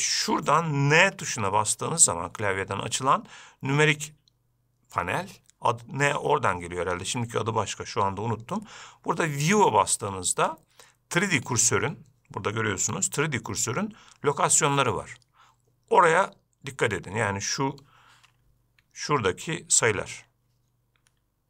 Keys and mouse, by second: 1.3 n.